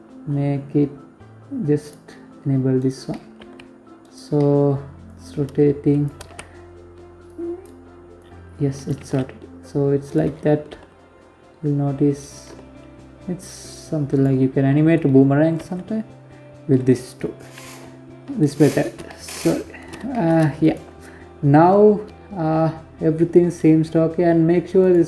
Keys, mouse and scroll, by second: 0.2 click, 1.2 right click, 1.5 middle click, 1.8 r, 2.8 middle click, 3.5 click, 4.6 ctrl+z, 5.7 click, 6.6 click, 7.4 g, 8.7-9.1 scroll down 6, 9.1 g, 10.9 g, 13.1-13.9 scroll down 3, 14.0 g, 16.0 KP_7, 16.6-17.0 scroll up 6, 17.5 shift+middle click, 18.0 scroll up 2, 18.5 shift+middle click, 19.0 right click, 20.8-21.6 scroll down 8, 22.3 scroll up 2, 23.2 click, 24.5 click.